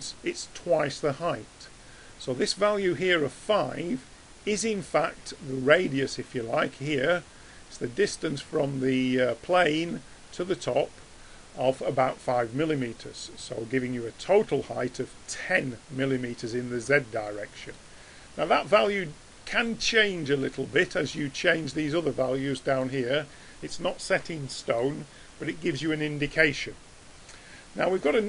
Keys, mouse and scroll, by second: 24.6-26.6 drag, 26.6-28.2 middle drag.